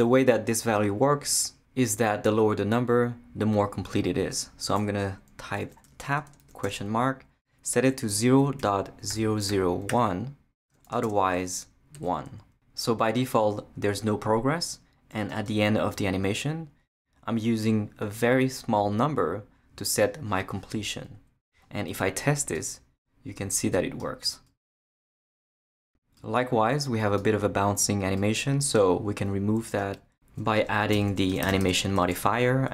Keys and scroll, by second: 5.6-10.8 typing, 11.9 i, 30.6 Return, 30.7-32.7 typing.